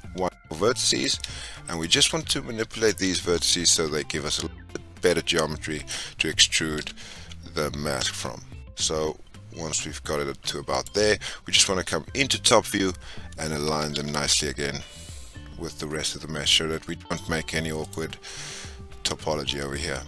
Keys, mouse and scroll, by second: 0.8 click, 1.6 shift+click, 2.7 s, 6.7 g, 12.1 click, 13.7 g, 19.6 scroll down 2, 19.7-20.0 middle drag.